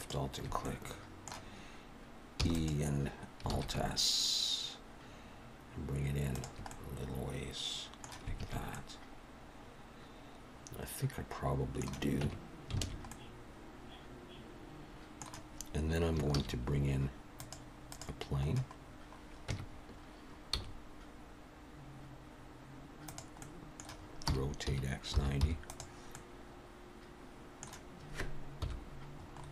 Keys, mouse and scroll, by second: 0.6 middle click, 2.4 e, 3.5 alt+s, 6.7 middle click, 8.4 alt+a, 8.7 middle click, 12.3 Tab, 12.8 alt+a, 13.1 middle click, 16.4 shift+a, 18.6-19.3 scroll down 4, 19.5 Tab, 20.6 s, 23.4 middle click, 24.3 r, 26.1 middle click, 28.6 KP_1, 29.3-29.5 scroll up 3.